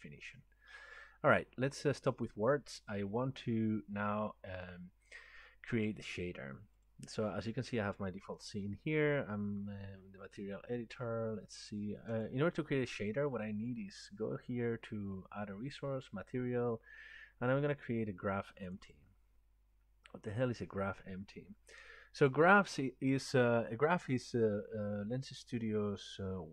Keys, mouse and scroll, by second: 2.2 click, 6.9 click, 12.2 click, 17.1 scroll down 1, 18.8 click, 22.1 scroll, 22.3 click.